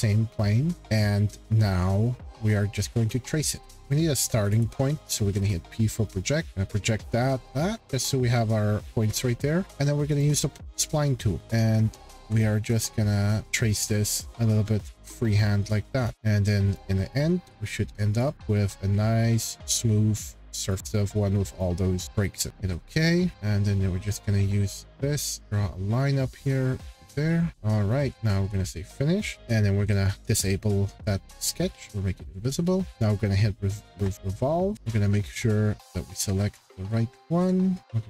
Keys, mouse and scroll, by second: 0.8-1.1 scroll, 3.3 scroll, 3.5 p, 4.5 click, 5.0-5.5 scroll, 6.0 scroll, 6.5 click, 6.8-7.1 scroll, 7.4 click, 7.9 click, 8.9 scroll, 9.4 middle click, 9.7 middle click, 10.2 click, 10.7 middle click, 11.0-11.4 scroll, 11.4 click, 12.8 ctrl+click, 13.4 ctrl+click, 14.2 click, 14.9 click, 16.0 ctrl+click, 16.1 ctrl+click, 16.1 scroll, 16.7 ctrl+click, 18.2 ctrl+click, 18.4 scroll, 19.5 click, 20.7 click, 20.9 click, 21.6 click, 22.0 click, 22.1 click, 22.5 right click, 22.5-24.1 scroll, 24.1-24.5 scroll, 27.4 click, 27.4-27.8 scroll, 27.5 Escape, 28.1 click, 29.3 scroll, 30.0 click, 32.9 click, 34.0-34.7 scroll, 34.7 click, 35.0-35.6 scroll, 35.9 click, 36.1-37.4 scroll, 37.8 click.